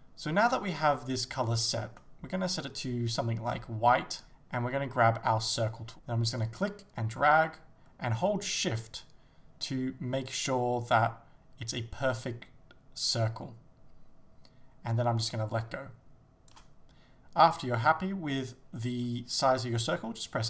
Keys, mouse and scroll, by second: 5.6 click.